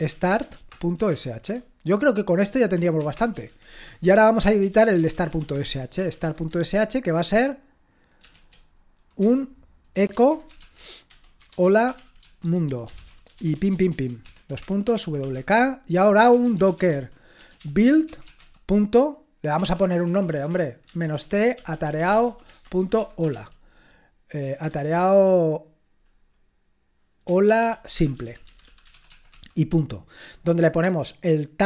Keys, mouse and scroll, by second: 0.0-1.7 typing, 3.1-6.7 typing, 8.4-23.2 typing, 14.2 Escape, 24.6-24.9 typing, 27.0-29.8 typing.